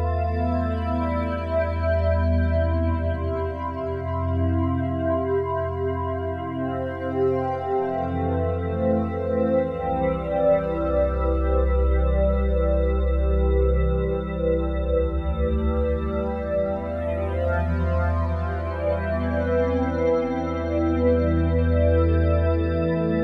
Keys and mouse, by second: 0.4-0.7 typing, 2.9 click, 5.8 super+d, 5.8-7.0 drag, 5.8 typing, 6.9-9.1 typing, 10.4 click, 11.8-13.3 ctrl+alt+drag, 15.5 g, 15.9 z, 17.1-20.1 drag, 20.1 g, 20.4 y, 22.3 click, 22.3 typing.